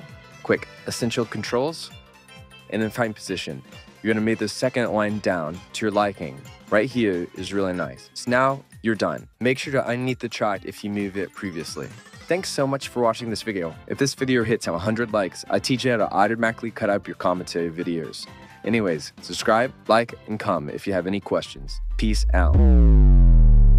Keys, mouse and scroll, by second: 2.2-3.3 drag, 6.4-10.1 drag.